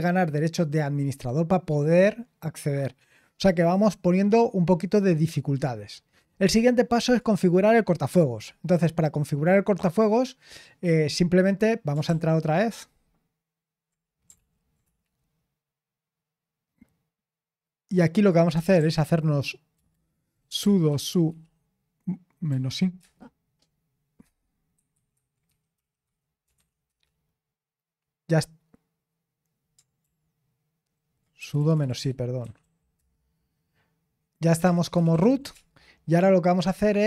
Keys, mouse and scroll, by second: 5.6-7.2 scroll down 1, 7.2 click, 12.1 ctrl+p, 14.4 ctrl+p, 14.9 Return, 18.3-23.0 typing, 24.5-28.2 typing, 30.0 ctrl+p, 31.4-33.1 typing, 34.3-35.7 typing.